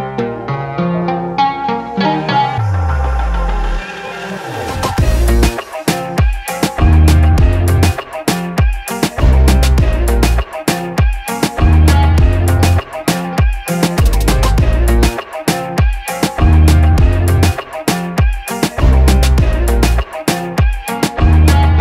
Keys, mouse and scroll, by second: 3.8 Tab, 7.2 click, 8.1 shift+Tab, 9.0 shift+Tab, 12.5 shift+Tab, 13.2 Tab, 15.6 click, 20.9 click.